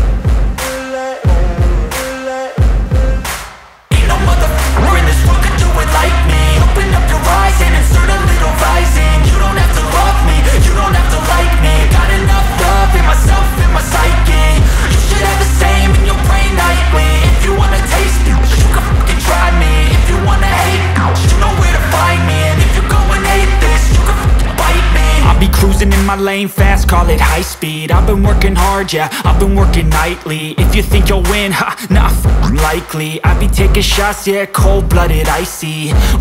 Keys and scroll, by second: 4.0 F3, 4.6 Escape, 5.0 F2, 19.1 F2, 29.0 Escape.